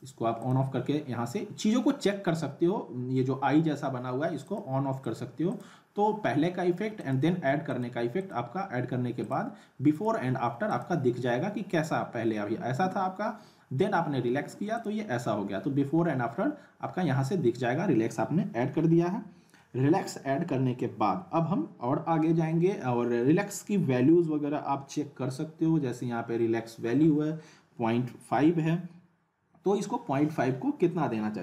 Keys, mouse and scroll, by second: 4.5 click, 14.8 click.